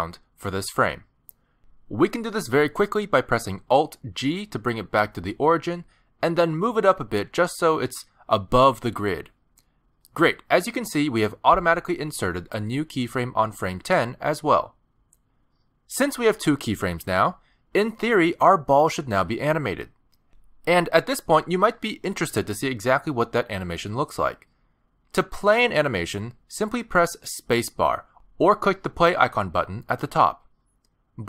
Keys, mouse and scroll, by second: 1.5 middle click, 2.9 alt+g, 3.9 shift+middle click, 4.3 scroll up 4, 4.6 middle click, 5.2 g, 7.3 middle click, 8.5 scroll down 1, 8.6 middle click, 9.7 middle click, 10.1 scroll down 3, 10.4 shift+middle click, 10.7 middle click, 11.3 shift+middle click, 27.7 space, 29.7 click, 30.7 click.